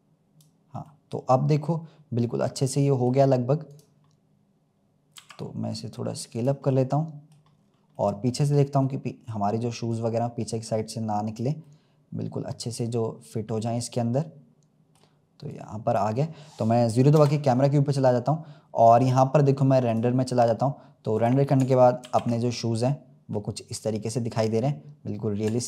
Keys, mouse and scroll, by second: 0.8-3.6 middle drag, 3.6-4.0 drag, 4.0-5.1 scroll up 1, 5.1 s, 6.6-7.4 middle drag, 7.4 scroll up 1, 7.5 scroll down 1, 7.7 scroll up 1, 7.9-9.8 middle drag, 9.8 click, 11.6-13.0 middle drag, 13.0-13.5 scroll up 1, 13.5-15.4 middle drag, 15.4 click, 17.0 KP_0, 18.4-18.8 scroll up 2, 20.1 click, 21.1 click, 22.0 ctrl+s, 22.4-22.9 scroll up 5, 24.4-24.8 scroll down 3.